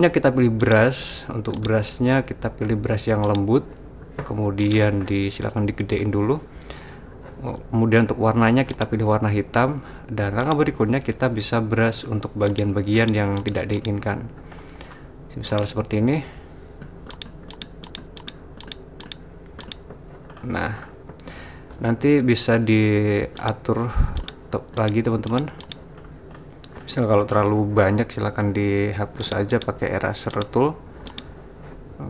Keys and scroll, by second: 6.0-6.4 typing, 21.8-22.2 typing.